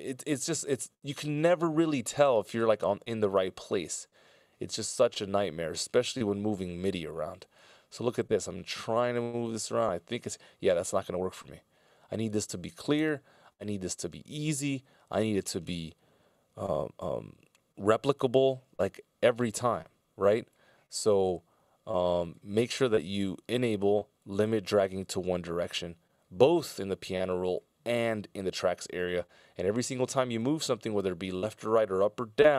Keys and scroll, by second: 11.0 super+z, 13.0 super+z, 32.4 F16, 32.4 Delete.